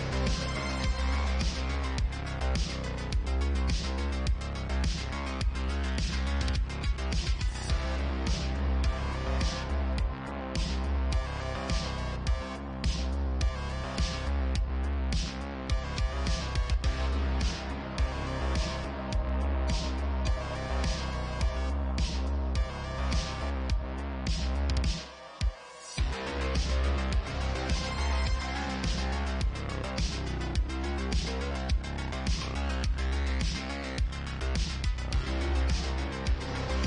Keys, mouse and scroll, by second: 0.7 e, 3.5 ctrl+z, 6.5 ctrl+r, 8.6 alt+click, 10.1-16.9 drag, 16.9-17.9 middle drag, 17.4 Tab, 17.9 click, 18.1-19.1 alt+middle drag, 18.2 alt+x, 19.1 click, 19.6-21.1 ctrl+middle drag, 19.8 ctrl+a, 20.3 Tab, 21.1 click, 21.1-22.4 middle drag, 22.1 Tab, 23.7 Tab, 24.7 ctrl+1, 24.9 ctrl+2, 25.5 click, 26.4-33.0 middle drag, 27.6 KP_5, 31.5 ctrl+w, 35.9 ctrl+w, 36.4-36.8 shift+middle drag.